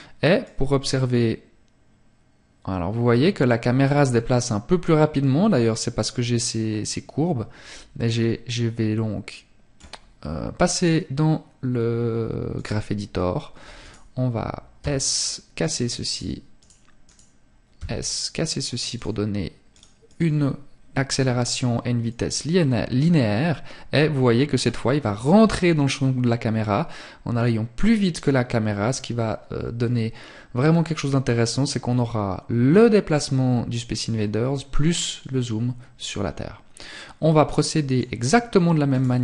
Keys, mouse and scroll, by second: 9.7 click, 19.1 click, 21.1 click, 37.9 right click.